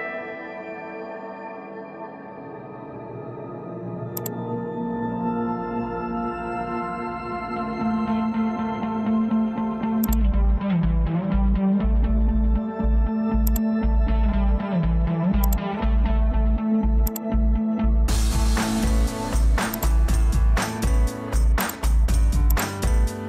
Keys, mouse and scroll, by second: 2.8 Return, 4.4 Escape, 8.9 Escape, 11.3 Delete.